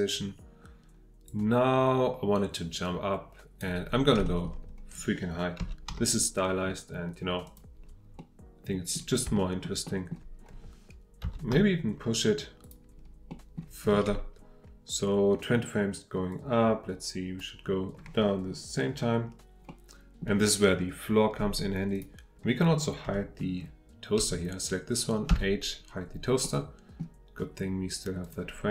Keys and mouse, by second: 1.3-3.6 drag, 4.2 shift+middle drag, 5.6 g, 5.9 z, 7.4 click, 8.2-9.0 middle drag, 9.4 shift+middle drag, 9.9 shift+middle click, 11.2 g, 11.5 z, 12.6 click, 13.4 click, 16.3-17.4 drag, 19.7-20.2 middle drag, 26.4-27.0 middle drag, 28.2 click.